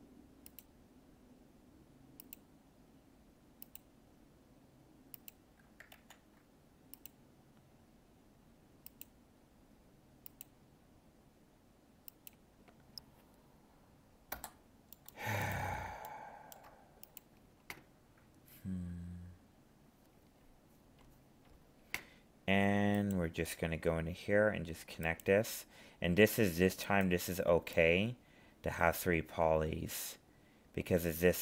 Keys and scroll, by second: 6.0 ctrl+z.